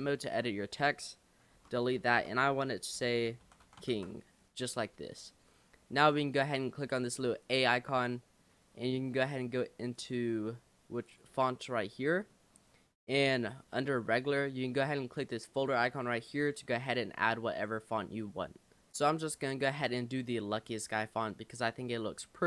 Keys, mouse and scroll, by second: 1.6-3.8 typing, 6.0 Tab, 7.4 click, 8.1-9.3 shift+middle drag, 9.3-12.4 drag, 12.4 middle drag, 12.6-13.5 scroll up 2, 13.5 scroll up 1, 18.9 click, 19.5-21.8 shift+middle drag, 21.8 Tab.